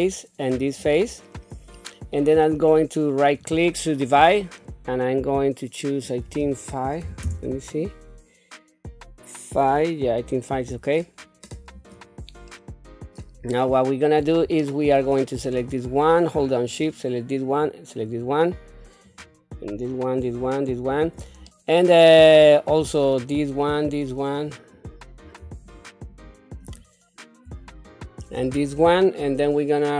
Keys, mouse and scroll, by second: 0.1 middle click, 0.8 shift+click, 1.7 middle click, 3.1-4.1 shift+right drag, 6.0-7.2 drag, 11.7 click, 12.5 middle click, 13.4-14.0 scroll up 1, 14.0-14.4 scroll down 1, 14.6 shift+middle click, 15.3 click, 16.7 shift+click, 17.5 shift+click, 18.0 shift+click, 19.0 shift+click, 19.7 shift+click, 20.2 shift+click, 20.8 shift+click, 21.5 middle click, 23.1 shift+click, 23.7 shift+click, 24.3 shift+click, 24.7 shift+click, 25.6 shift+click, 26.1 shift+click, 26.6 shift+click, 27.7 shift+click, 28.7 middle click.